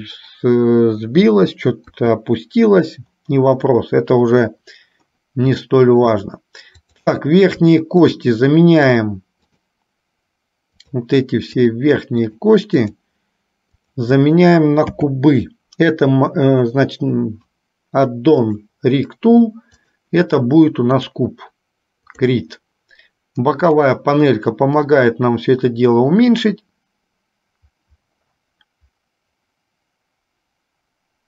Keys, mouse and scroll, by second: 1.8 KP_1, 5.8 shift+middle click, 7.1 click, 8.3 shift+click, 9.1-10.2 shift+drag, 11.1 shift+click, 11.7 shift+click, 12.4 shift+click, 12.9 shift+click, 13.9 shift+click, 15.1 n, 18.6 click, 19.8-21.4 drag, 22.8 click, 23.9 click, 24.9-31.2 drag.